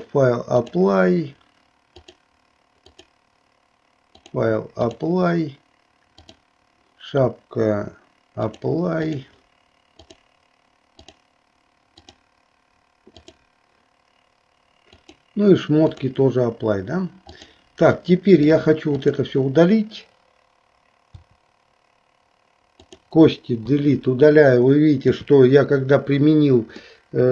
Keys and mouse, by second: 0.1 click, 2.0 click, 3.0 click, 4.3 click, 6.3 click, 8.5-10.2 drag, 11.0 click, 15.1-16.2 drag, 18.1 middle click, 22.8 click, 26.9 middle click.